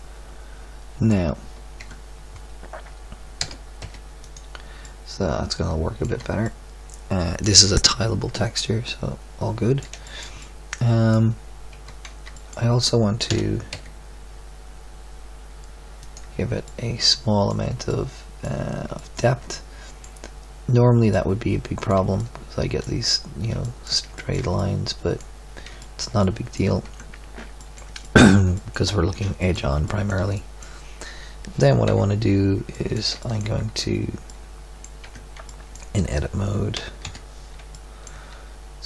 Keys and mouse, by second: 1.8 Tab, 3.4 s, 6.1 Tab, 7.3 middle click, 10.5 middle drag, 11.7 Tab, 13.2 e, 16.8 middle click, 17.0 middle click, 17.3 middle click, 18.0 middle click, 20.0 middle click, 22.8 middle click, 26.8 Tab, 30.0 middle drag, 31.9 KP_3, 35.0 Tab, 36.7 z, 37.0 KP_7, 37.8-38.8 middle drag.